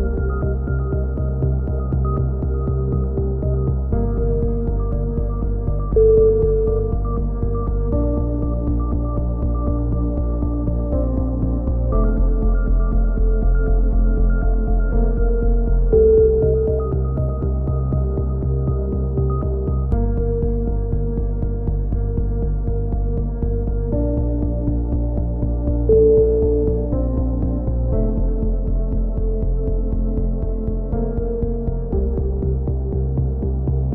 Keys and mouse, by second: 0.1 z, 4.5 click, 5.1 right click, 5.1 KP_3, 5.6 z, 5.7 e, 6.1-7.5 drag, 7.6-9.4 typing, 9.5 click, 10.6-12.6 drag, 12.1 right click, 12.6 f, 12.8 a, 12.9 click, 15.1 f, 15.1 a, 17.9 x, 18.6 click, 18.6 KP_3, 19.0 e, 19.2 z, 19.4 click, 20.5 click, 21.1 a, 21.1 z, 21.5 right click, 21.5 x, 22.0-23.3 right drag, 23.2 f, 23.3 a, 23.5 z, 24.0 click, 25.1 right click, 25.8 f, 25.9 a, 26.2 right click, 27.0 f, 27.3 click, 27.3 a, 27.3 z, 28.1 right click, 28.4 KP_1, 28.6 z, 28.8 z, 29.2 g, 31.8 a, 31.8 Tab, 32.0 click, 33.2 click, 33.6-33.9 drag.